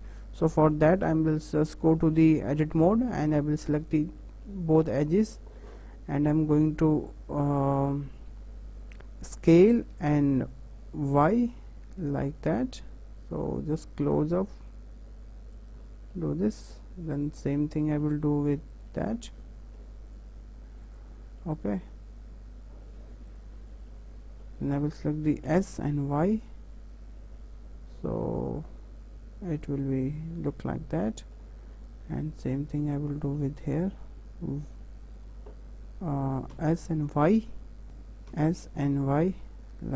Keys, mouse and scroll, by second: 0.5 middle click, 1.0 Tab, 1.4-2.6 middle drag, 2.6 2, 2.8 scroll up 2, 3.1 middle click, 3.9 click, 4.2 middle click, 4.8 shift+click, 5.1-8.2 middle drag, 9.5 s, 16.1-17.1 middle drag, 17.1 click, 17.7 middle click, 18.7 alt+shift+click, 19.1 middle click, 20.1 click, 20.8 click, 21.4-23.3 middle drag, 23.3 alt+shift+click, 23.9-25.4 middle drag, 25.4 s, 30.6-32.2 middle drag, 32.2 alt+click, 33.1 middle click, 33.9 y, 35.0-36.5 right drag, 36.5 s, 37.8 middle click, 38.3 s.